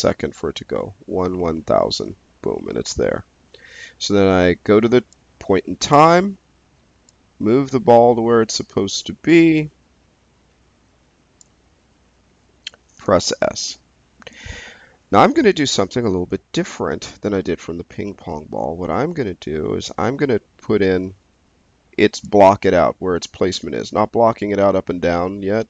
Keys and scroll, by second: 13.2 s.